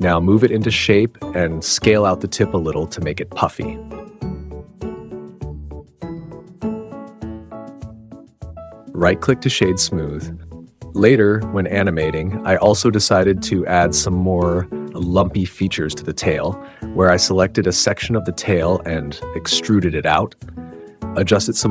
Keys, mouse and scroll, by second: 1.5-2.0 alt+o, 2.3 s, 3.9-6.3 middle drag, 6.6 Tab, 7.8 click, 7.8-8.9 middle drag, 8.9 right click, 9.1 click, 10.8 Tab, 12.9 e, 14.0 click, 14.4 shift+click, 14.7 e, 15.5 click, 15.7 click, 16.1 g, 16.4 click, 16.4 super+z, 16.6 g, 17.4 click, 17.6 click, 17.9 g, 18.4 click, 18.6 click, 18.8 g, 19.1 super+z, 19.4 g, 19.9 click, 20.5 shift+click, 20.8 g.